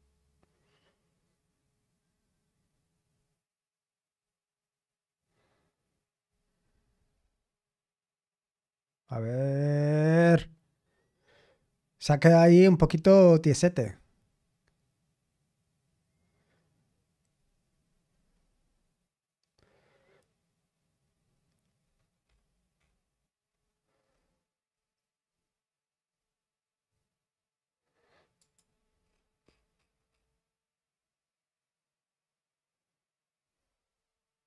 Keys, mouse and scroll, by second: 21.9-23.4 scroll up 2, 23.6-24.2 scroll up 2, 24.2-25.4 scroll down 5, 26.3-27.6 scroll up 1, 28.4 click, 29.0-31.0 scroll down 2.